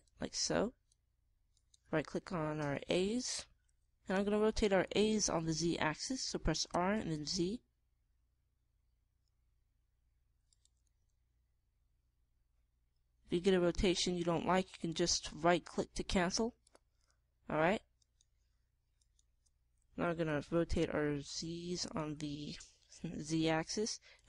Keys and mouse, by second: 0.3-2.5 drag, 2.5 middle click, 2.8-5.5 drag, 7.6 r, 11.8 r, 17.6-18.9 drag, 18.9 middle click, 19.4-21.9 drag, 21.2 r, 23.9 r.